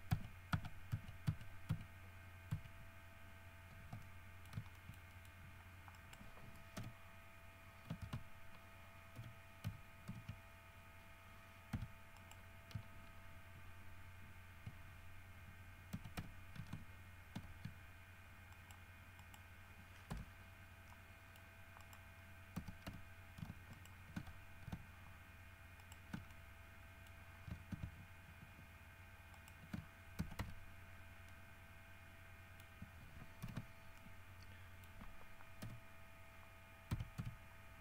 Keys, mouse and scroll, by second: 1.5 ctrl+z, 2.7 ctrl+z, 4.2 ctrl+middle click, 4.9 shift+middle click, 6.1 right click, 7.0 l, 8.2 alt+a, 9.4 l, 10.3 shift+h, 11.9 3, 12.4 middle click, 16.1 x, 16.4 f, 18.7 middle click, 19.4 middle click, 20.3 KP_Decimal, 21.1 middle click, 22.0 middle click, 22.8 x, 23.1 f, 23.9 alt+shift+middle click, 26.0 alt+shift+middle click, 26.5 alt+shift+middle click, 29.5 alt+shift+middle click, 30.4 alt+shift+x, 30.6 f, 31.1 scroll down 2, 31.5-33.0 middle drag, 33.6 alt+h, 34.2-35.3 alt+middle drag, 35.8 l, 37.1 w, 37.4 r.